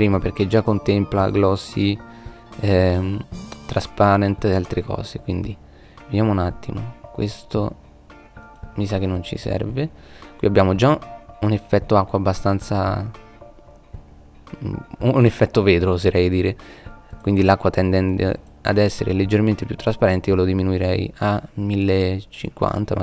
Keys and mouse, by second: 7.1-7.4 middle drag, 7.9 Delete, 9.3-10.6 middle drag.